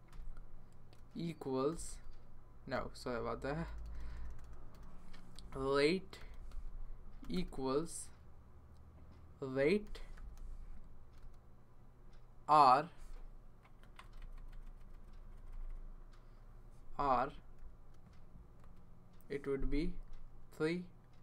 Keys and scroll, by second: 0.1 Return, 1.0 space, 1.7 =, 2.7-3.9 typing, 5.1-7.9 typing, 9.3-11.2 typing, 17.3 |, 18.6 space, 20.3 3.